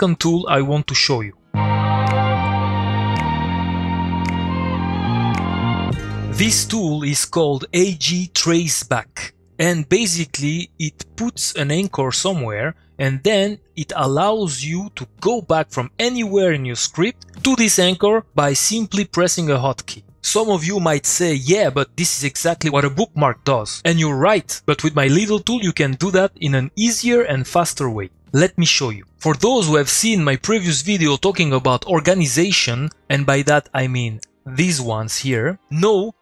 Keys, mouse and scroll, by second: 33.5-34.4 drag.